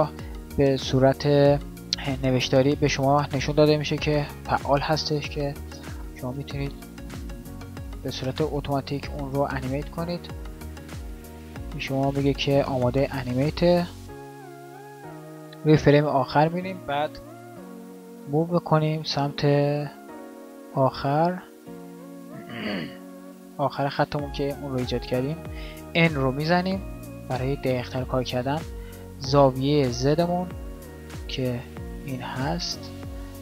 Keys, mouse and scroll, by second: 17.9 g, 20.7-21.3 drag, 23.9 g, 26.3 n.